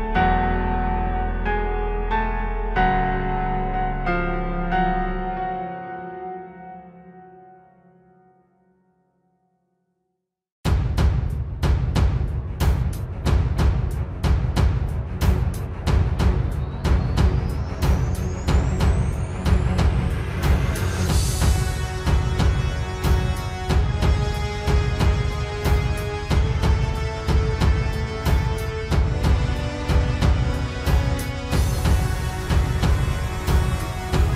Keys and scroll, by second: 0.3 ctrl+space, 1.8 ctrl+space, 2.0 ctrl+s, 3.0 ctrl+z, 3.1 ctrl+j, 10.8 ctrl+z, 11.1 ctrl+u, 14.9 ctrl+space, 16.1 ctrl+z, 17.6 ctrl+space, 18.4 ctrl+space, 19.8 ctrl+z, 21.4 ctrl+s, 25.5 ctrl+s, 26.7 ctrl+g, 30.5 ctrl+space, 31.7 ctrl+space, 32.6 ctrl+space, 33.1 ctrl+space.